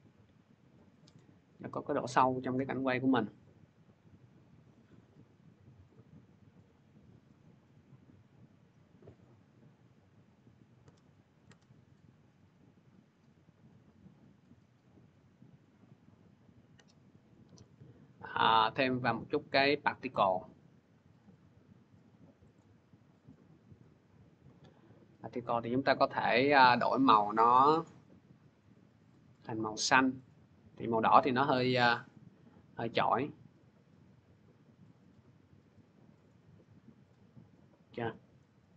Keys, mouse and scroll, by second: 11.2-16.3 drag, 19.3-21.0 drag, 22.4 click, 23.6 click, 25.7 click, 28.4 click, 29.2 middle click, 30.1 middle click, 31.5 click, 33.4 scroll, 36.9 click, 37.5-38.0 scroll, 38.1 middle click, 38.2 middle click.